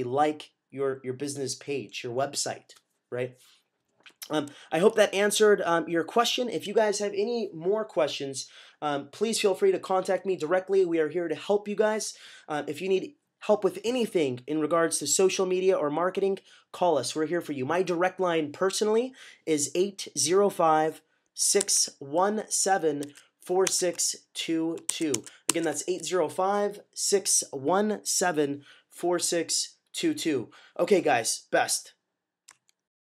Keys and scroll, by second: 21.5 Tab, 23.0 Tab, 23.6 Tab, 24.7 super+Tab, 24.9 super+Tab, 25.1 super+Tab, 25.5 super+Tab.